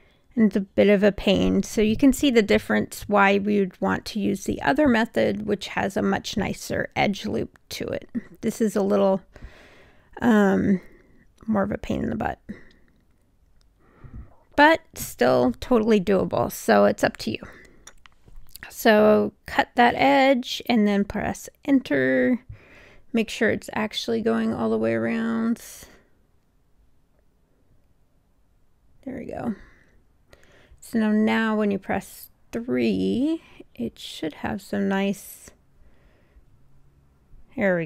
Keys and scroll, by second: 18.8 Return, 28.3 Return.